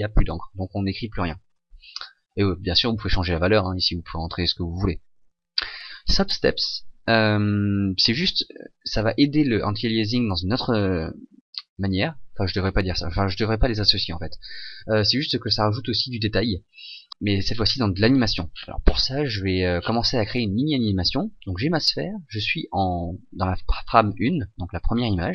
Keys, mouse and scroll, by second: 22.3 scroll down 6.